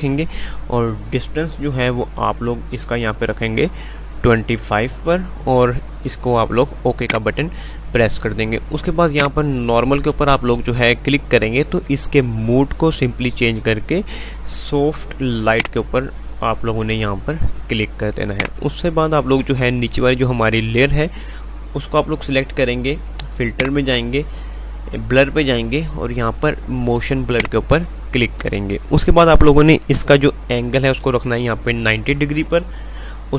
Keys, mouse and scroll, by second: 7.2 click, 15.7 click, 18.5 click, 23.5 click, 27.3 click.